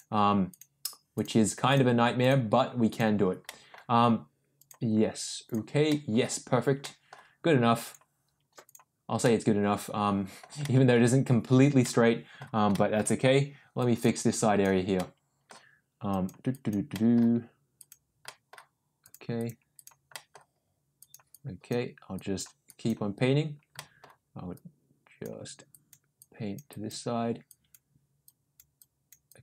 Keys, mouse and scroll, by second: 0.4 click, 1.1 click, 1.6 click, 2.1 click, 2.8 click, 3.4 middle click, 4.5 click, 5.4 click, 5.9 middle click, 6.8 middle click, 7.8 click, 8.6 click, 9.2 middle click, 10.6 middle click, 11.8 middle click, 12.7 shift+middle click, 13.7 click, 14.3 click, 14.9 middle click, 16.0 click, 16.5 click, 16.9 middle click, 17.7 click, 18.2 middle click, 19.0 click, 19.3 click, 19.7 click, 20.1 middle click, 20.9 click, 21.3 click, 22.1 click, 22.6 click, 23.7 middle click, 24.5 click, 25.7 click, 26.1 click, 26.7 click, 27.4 click, 28.2 click, 28.7 click, 29.2 click.